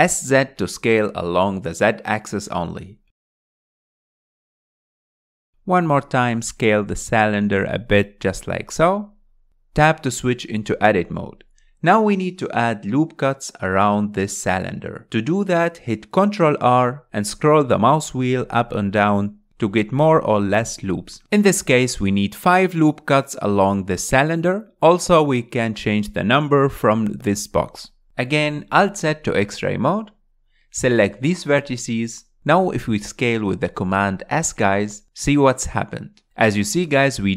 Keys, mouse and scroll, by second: 0.7 s, 3.0-4.1 scroll up 6, 4.2-5.3 shift+middle drag, 5.3-5.7 scroll up 3, 5.7-7.7 shift+middle drag, 7.7 s, 11.0 Tab, 16.5 ctrl+r, 23.6-27.1 drag, 29.2 alt+z, 30.6 click, 31.1 s, 35.8 scroll up 4, 36.3 shift+middle click, 37.0-37.3 scroll down 1.